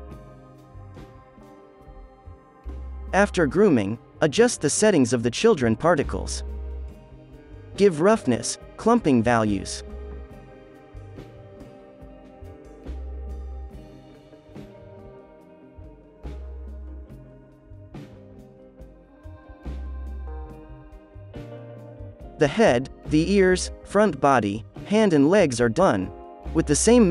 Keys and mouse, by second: 2.0 alt+a, 2.4 ctrl+s, 2.4 click, 3.2 click, 3.2 middle click, 3.2 right click, 3.6 click, 5.9 ctrl+s, 6.0-7.1 middle drag, 10.2-12.6 middle drag, 12.6-16.1 drag, 15.7 z, 16.1 middle click, 16.5 alt+a, 16.8 ctrl+s, 17.2-22.5 drag, 18.2 alt+a, 22.6 middle click, 23.7 middle click, 23.9 ctrl+s, 24.0 alt+a, 24.1 click, 24.5 z, 24.6 middle click, 24.7 z, 25.3 Tab, 25.8-27.1 drag.